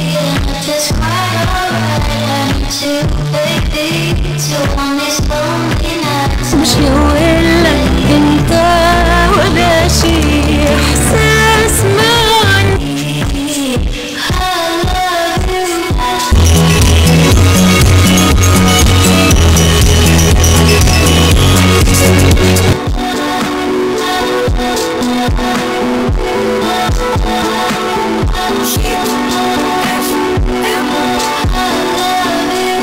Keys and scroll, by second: 12.8 Page_Down, 22.7 Page_Down.